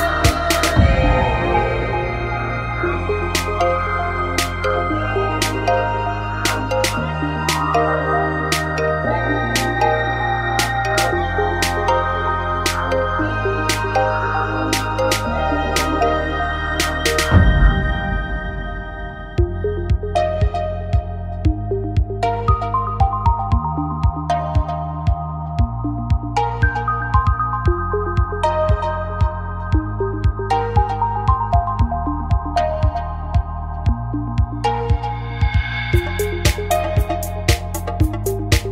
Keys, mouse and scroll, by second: 1.7 shift+d, 1.9 click, 3.2-5.2 drag, 3.7 shift+d, 6.3 middle click, 7.7 a, 26.6 right click, 27.5-28.8 right drag, 28.8 middle click, 29.6-31.1 right drag, 31.1-32.9 drag, 33.7 Tab, 34.2 middle click, 35.1 middle click.